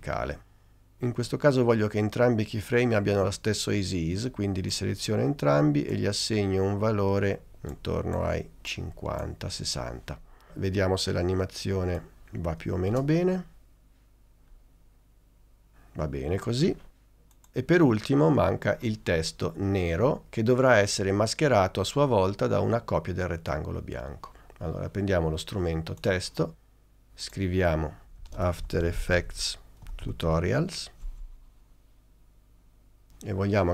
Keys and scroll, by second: 0.1 Return, 13.0 space, 27.8-31.0 typing.